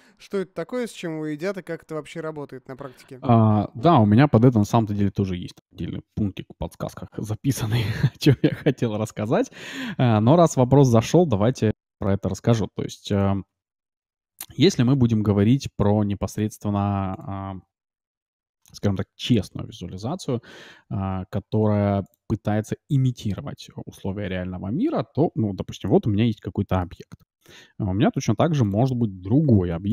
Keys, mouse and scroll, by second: 11.3 scroll down 1, 11.6-12.0 scroll up 1, 12.0-13.7 middle drag, 13.1-14.7 drag, 14.3 shift+a, 16.7 s, 18.1 ctrl+4, 20.5 t, 21.4 middle click, 22.0-25.2 drag, 24.1 t, 25.7-27.8 middle drag, 27.2 shift+a, 29.4 g.